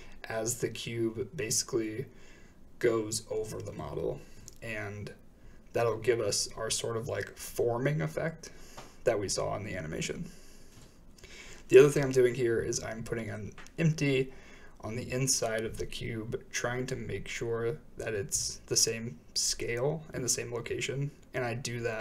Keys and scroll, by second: 8.1 g, 10.9 Return, 10.9 1, 10.9 s, 13.0 4, 13.1 Return, 16.0 typing, 19.8 Return, 19.8 4.